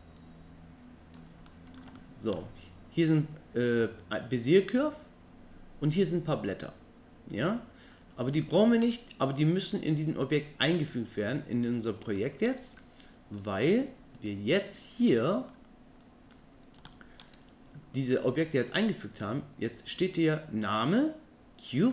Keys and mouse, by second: 0.2 click, 1.5-1.8 middle drag, 2.0-2.4 shift+middle drag, 8.4-8.8 shift+middle drag, 9.8-11.2 drag, 12.2-12.5 shift+middle drag, 15.1 middle click, 16.9-17.2 shift+middle drag.